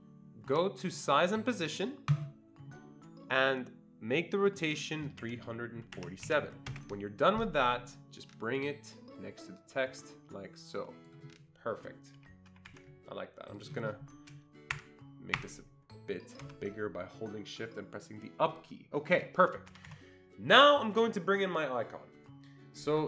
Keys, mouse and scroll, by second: 4.5 click, 5.2-6.2 typing, 5.2 click, 6.7 Return, 8.6-12.7 drag, 12.1 Escape, 12.5 Escape, 12.7 Escape, 13.5 click, 14.7 shift+Up, 15.3 shift+Up, 16.4 shift+Down, 19.7 Escape, 19.7 shift+Down, 19.7 shift+Up, 19.9 Escape.